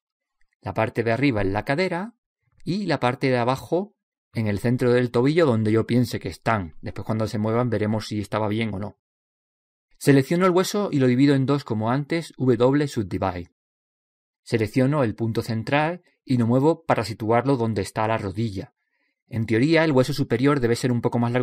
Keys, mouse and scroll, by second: 1.0 click, 1.0 middle click, 2.3-4.0 drag, 4.1 right click, 5.0 middle click, 5.9 click, 6.9 click, 8.7 click, 11.2 right click, 12.6 w, 14.8 right click, 16.9 click, 19.7 click.